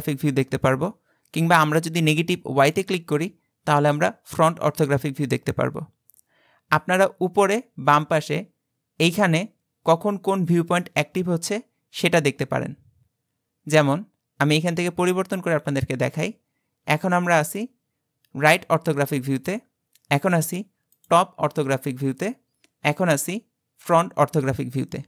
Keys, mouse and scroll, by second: 2.7 click, 17.5 click, 20.9 click, 23.7 click.